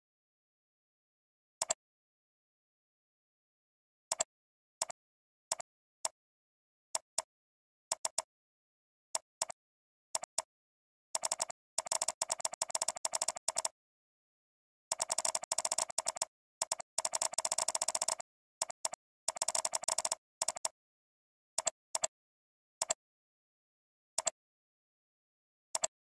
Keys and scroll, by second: 1.7 alt+space, 7.9 ctrl+space, 20.5 alt+space.